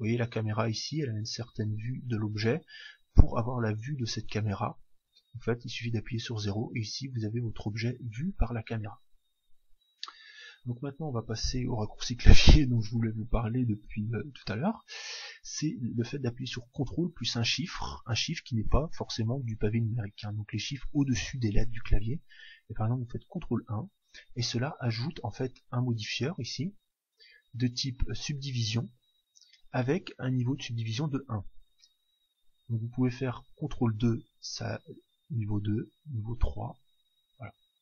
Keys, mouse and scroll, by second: 5.9 KP_0, 12.0-23.2 middle drag, 23.2 ctrl+1, 26.6-28.4 drag, 28.7-30.5 drag, 33.5 ctrl+2, 35.9 ctrl+3.